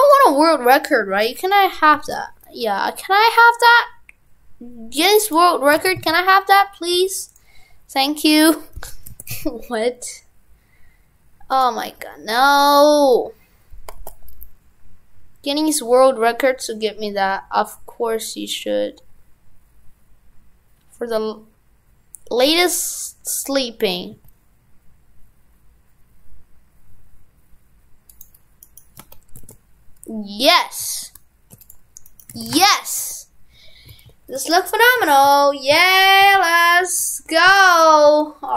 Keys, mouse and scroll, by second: 5.8 shift+f, 8.4 right click, 8.8 Tab, 9.1 shift+f, 11.9 Tab, 28.8 right click, 29.0 Tab, 29.4 shift+f, 32.1 right click, 32.4 shift+f, 35.1 shift+f.